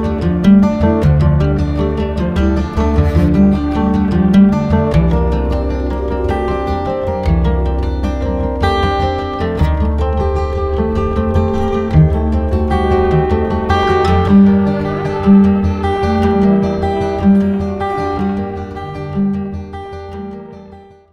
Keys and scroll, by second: 8.2 ctrl+z.